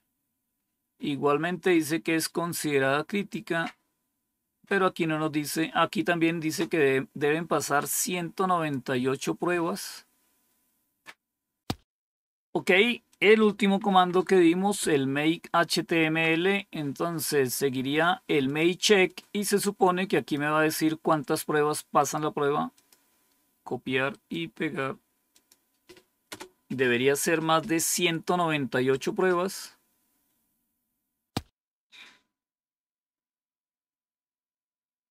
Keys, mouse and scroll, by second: 0.5 scroll down 2, 1.6 scroll down 2, 2.3 scroll down 2, 7.9 click, 9.7-11.0 scroll up 1, 11.0-13.0 scroll up 1, 13.0 click, 13.9 Home, 15.9 End, 18.4 click, 19.0-20.3 drag, 21.9 right click, 22.7 click, 24.0 right click, 25.3 click, 26.3 Return.